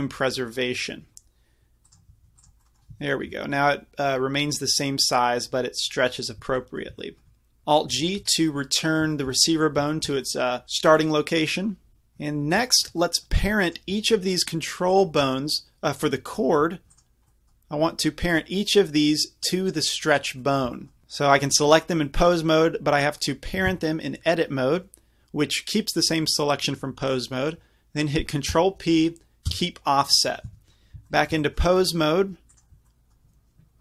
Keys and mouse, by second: 0.3-6.5 drag, 3.4 g, 8.0 alt+g, 13.7-21.0 drag, 23.7 Tab, 28.6 ctrl+p, 30.5 Tab, 31.8-33.8 drag.